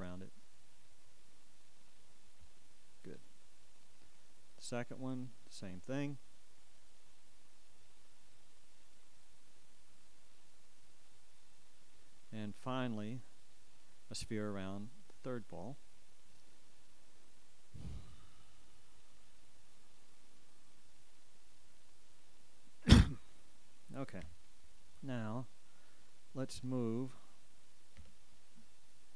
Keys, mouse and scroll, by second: 12.7-17.5 ctrl+drag, 12.7-17.5 ctrl+right drag.